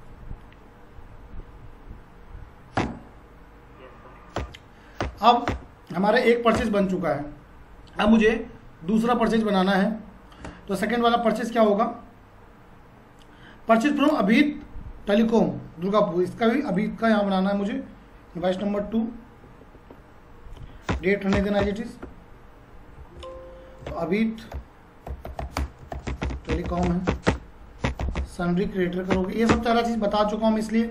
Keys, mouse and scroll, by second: 2.8 Return, 11.2 click, 12.5 scroll down 1, 14.0 click, 18.4 F2, 20.6 2, 20.9 Return, 23.0 alt+c, 23.9-28.7 typing, 29.1 Up, 29.5 Return.